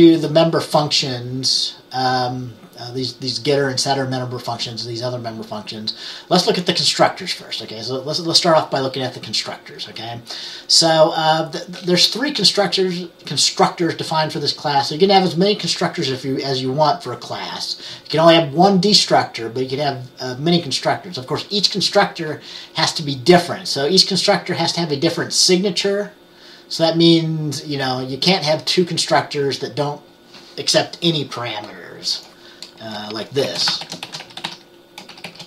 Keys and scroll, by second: 33.0 Return, 33.3-35.4 typing.